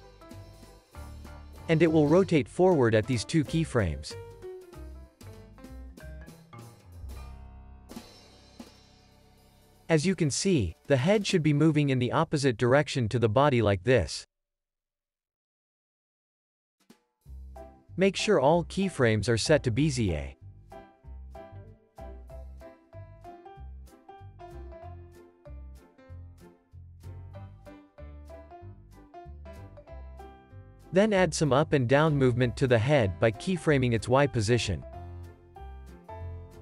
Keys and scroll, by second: 0.6 alt+q, 1.2 z, 5.0 alt+shift+s, 10.5-13.9 typing, 15.4 super+s, 21.4 super+s, 22.4 x, 22.8 z, 23.4 x, 23.8 z, 26.2 x, 29.3 z, 30.0 super+s, 30.4 z, 31.0 x, 32.2 alt+shift+w, 36.3 z.